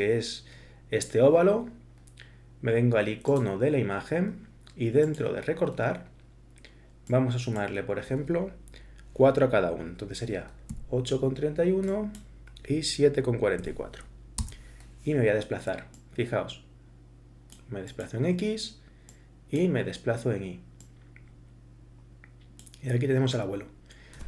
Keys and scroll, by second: 10.7 8, 13.6 7, 14.4 Return.